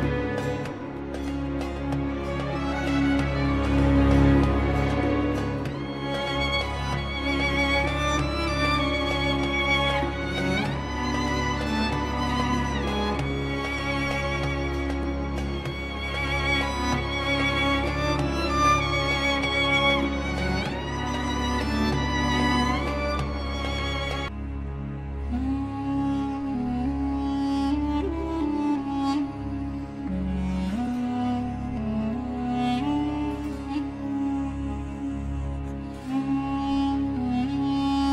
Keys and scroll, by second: 13.0 3, 25.2 4, 25.4 Return, 26.5 KP_Add, 30.6 6, 31.0 Return, 34.9 ctrl+Page_Down, 37.4 ctrl+g.